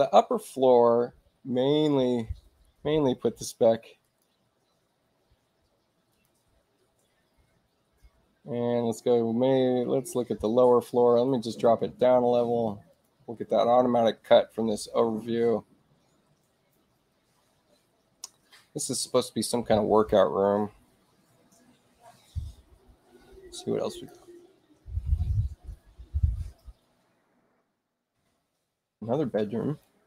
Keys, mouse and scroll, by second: 3.9 click, 6.0 click, 12.8 click, 23.8 click, 26.9 shift+i, 29.7 click.